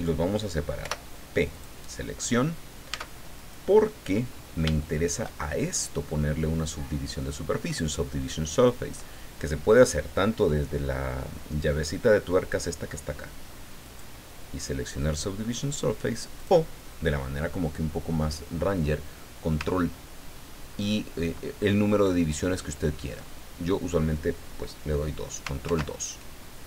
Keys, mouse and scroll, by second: 0.8 p, 1.5 click, 2.9 Tab, 3.4 right click, 4.8 shift+middle click, 5.7-6.7 middle drag, 13.8 click, 16.4 click, 25.6 ctrl+2.